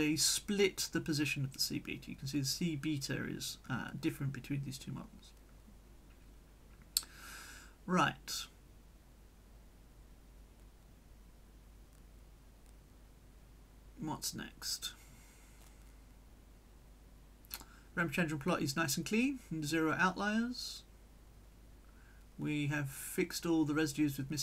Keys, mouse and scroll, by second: 1.5-2.8 drag, 4.3-6.4 drag, 7.1 click, 9.5 click, 12.0 click, 12.4-16.4 drag, 16.4-17.5 middle drag, 19.1 click, 20.9 click, 23.2 click, 23.6 click.